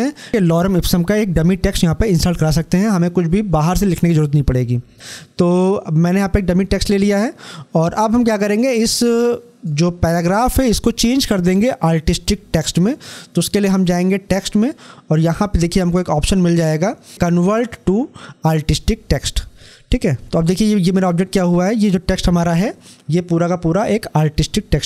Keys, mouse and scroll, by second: 5.9-12.0 drag, 13.5 click, 19.0 click.